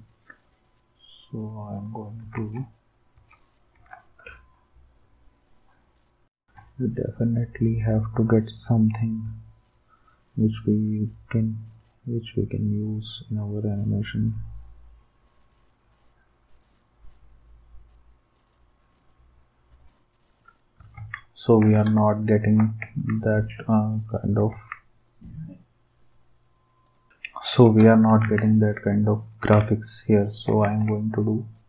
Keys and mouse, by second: 2.4 alt+Tab, 19.8 click, 19.9 right click, 21.0 ctrl+s, 22.8 ctrl+s, 24.5 ctrl+s, 28.2 ctrl+s, 30.6 ctrl+s.